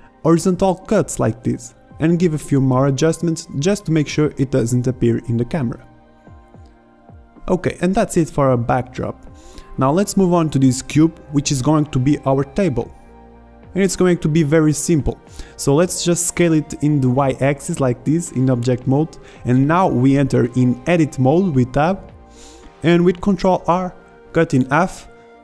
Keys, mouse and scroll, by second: 0.0 ctrl+r, 0.8 drag, 1.7 a, 2.1 middle click, 3.2-4.5 drag, 3.7 right drag, 3.9 a, 4.2 right drag, 4.6 middle drag, 5.4 middle click, 5.8 Tab, 6.5 Tab, 6.7 Tab, 6.8 right click, 6.9 Tab, 7.1 a, 7.3 b, 7.7 b, 8.1 click, 8.9 Tab, 9.2 Tab, 9.4 a, 9.5 b, 9.9 click, 10.3 drag, 10.4 Tab, 11.9 drag, 12.3 ctrl+z, 13.4 s, 15.2-19.1 middle drag, 21.4 Tab, 22.5 ctrl+r.